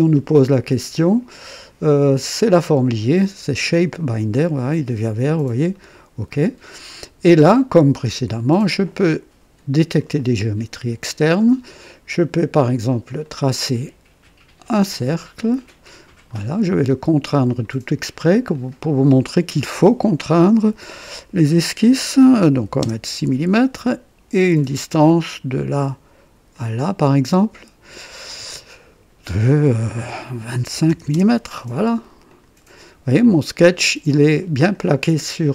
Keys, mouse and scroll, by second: 3.8 click, 5.7 click, 6.9-7.6 right drag, 8.3 click, 9.9 click, 13.2 click, 14.6 click, 15.8 click, 16.3 right click, 17.3 click, 18.5 click, 22.5 KP_6, 22.8 KP_Enter, 24.5 click, 26.5 click, 28.4 click, 30.7 KP_2, 30.8 KP_5, 31.1 Return, 32.2 click, 33.2-34.9 drag.